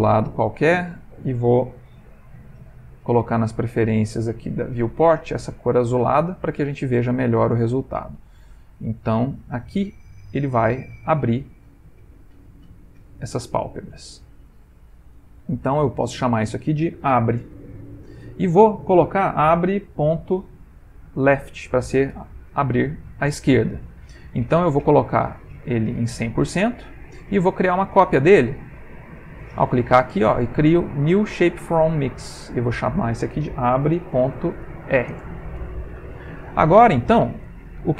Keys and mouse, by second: 2.4 ctrl+c, 3.1 click, 4.4 click, 5.4 ctrl+v, 9.0 click, 10.0 click, 13.2 click, 16.0 click, 16.1 click, 24.9 click, 26.3 click, 29.3 click, 32.5 click, 32.7 click.